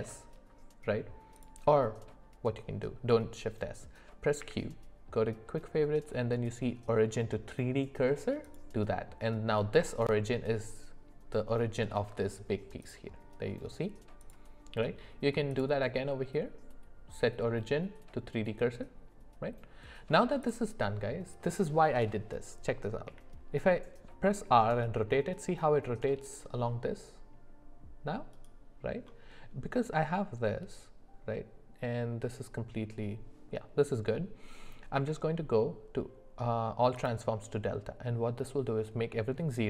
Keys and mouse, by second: 4.4 q, 12.8 click, 14.2 click, 15.5-19.2 drag, 20.4 click, 23.0 r, 34.9 q.